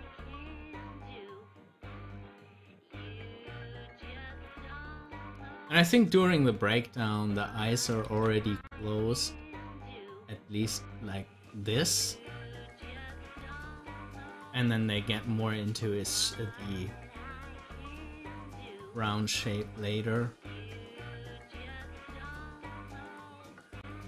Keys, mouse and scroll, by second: 15.1 scroll up 1.